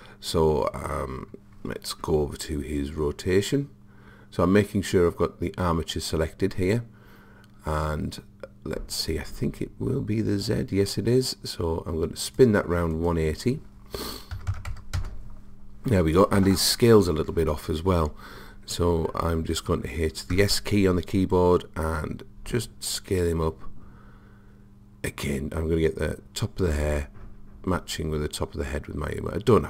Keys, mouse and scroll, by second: 0.0-3.5 middle drag, 9.6 click, 13.0 click, 20.4 s.